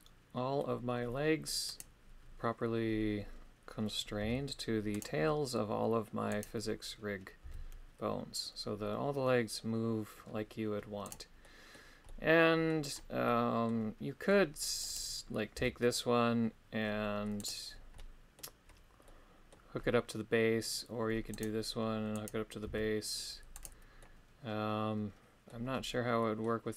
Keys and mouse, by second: 1.7 right click, 4.2 g, 5.0 right click, 6.3 right click, 7.4 g, 11.4 middle click, 12.0 middle click, 13.2 middle click, 14.8 right click, 15.5 g, 17.3 right click, 18.0 middle click, 19.0 middle click, 21.3 right click, 22.1 right click, 22.6 g, 23.5 right click, 24.0-25.5 middle drag, 26.2 middle click.